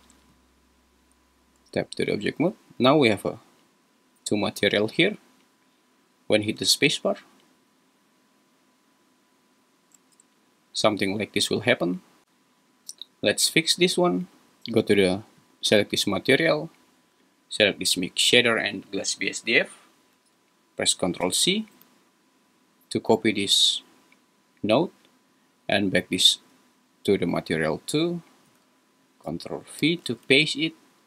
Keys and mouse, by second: 1.6 Tab, 4.4 `, 6.7 space, 9.9 space, 12.9 g, 17.2 click, 17.6-18.3 drag.